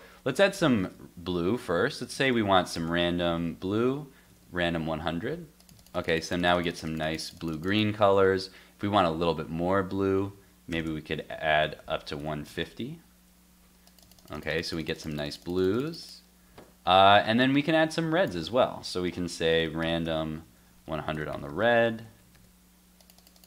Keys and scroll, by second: 3.8 super+s, 4.3 super+Tab, 4.7 super+r, 8.1 super+Tab, 8.9 super+s, 11.7 super+s, 12.2 super+Tab, 12.5 super+r, 16.6 super+Tab, 20.5 super+s, 21.6 super+s, 22.0 super+Tab, 22.3 super+r.